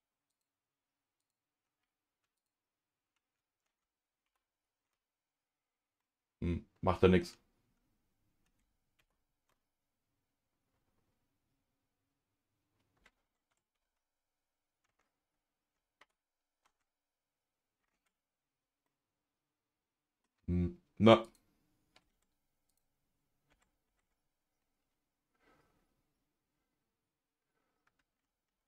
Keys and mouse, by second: 0.3 click, 1.2 ctrl+click, 4.2 ctrl+shift+c, 6.0-7.2 middle drag, 9.0 ctrl+shift+c, 13.5 Tab, 16.0 ctrl+shift+c, 17.9 Tab, 18.8-20.2 middle drag, 21.2 click, 22.1 Tab, 23.5 Tab, 23.8 Tab.